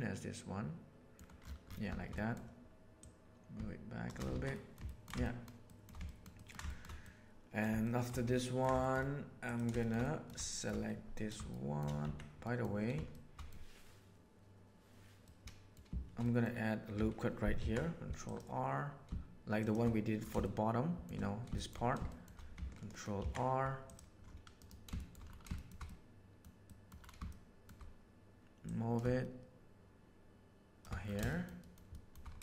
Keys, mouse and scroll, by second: 2.1 middle click, 3.1 click, 4.3 alt+a, 4.5 middle click, 4.9 ctrl+middle drag, 5.3 shift+middle drag, 5.7 shift+middle click, 6.0-6.5 ctrl+middle drag, 6.7 shift+middle click, 7.0 middle click, 7.8 shift+middle click, 8.3-8.7 ctrl+middle drag, 8.8 shift+middle click, 9.8 shift+middle click, 10.0 middle click, 10.4 shift+middle click, 11.5-11.9 shift+middle drag, 12.0 Tab, 12.5 middle click, 13.1 middle click, 15.2 middle click, 16.1 middle click, 17.5 ctrl+r, 20.4 shift+middle click, 21.5 shift+middle click, 22.1 shift+middle click, 23.1 ctrl+r, 24.9 shift+middle click, 25.5 middle click, 25.8 middle click, 26.6 middle click, 27.2 shift+middle click, 28.6-30.8 drag, 31.3 shift+middle click, 31.6 shift+middle click, 31.9 shift+middle click.